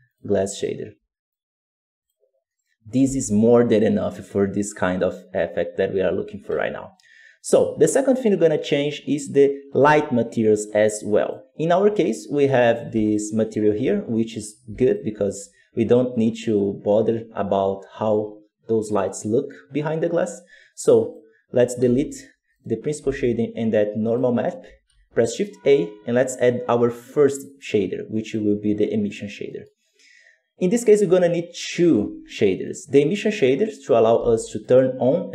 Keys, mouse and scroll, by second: 1.9 click, 2.5-4.2 right drag, 4.2 g, 6.4-11.1 right drag, 11.1-13.0 drag, 14.7 ctrl+shift+click, 21.7 x, 22.4 right click, 22.9 g, 29.2 scroll up 4, 29.4 middle click, 30.3-31.0 scroll up 1, 31.0 click, 33.3 click, 33.7 right click, 34.0 g.